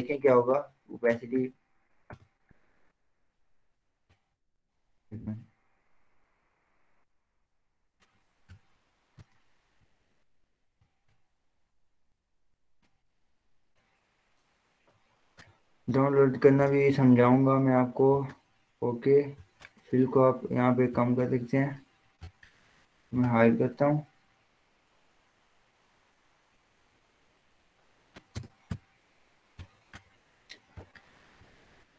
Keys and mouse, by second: 1.3 click, 2.5 Return, 3.4 click, 4.2 ctrl+z, 5.1 click, 8.8 click, 9.9 ctrl+z, 11.1-17.0 drag, 28.6 Return, 29.8 click.